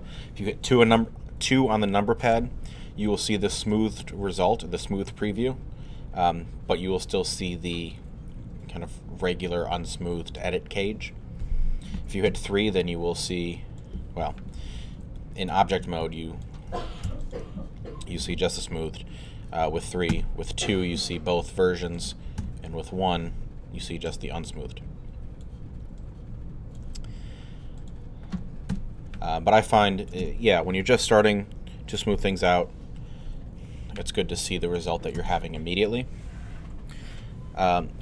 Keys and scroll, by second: 12.3 3, 13.1 alt+3, 17.1 alt+q, 17.6 q, 20.1 2, 22.4 alt+1, 23.1 1, 28.7 alt+2.